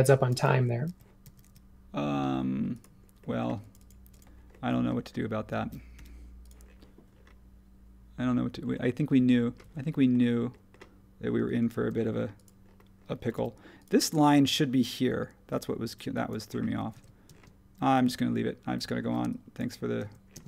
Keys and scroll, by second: 5.9 |, 9.6 ↺, 11.4 space, 13.3 m, 15.8 e, 16.9 super+z, 19.0 e, 20.0 super+z.